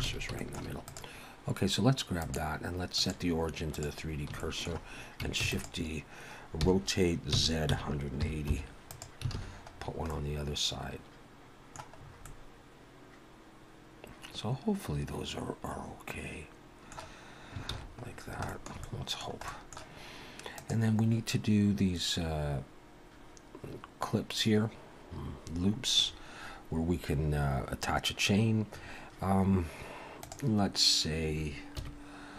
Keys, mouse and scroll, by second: 0.1 alt+a, 0.4 shift+middle click, 0.8 click, 2.1 click, 4.4 shift+middle click, 5.4 shift+d, 6.7 r, 9.4 alt+a, 9.7-12.0 scroll down 3, 10.1 middle click, 12.0-12.4 scroll up 3, 12.3 middle click, 17.7 ctrl+s, 18.0-18.5 scroll down 4, 18.5 shift+middle click, 18.8 middle click, 31.8 KP_1.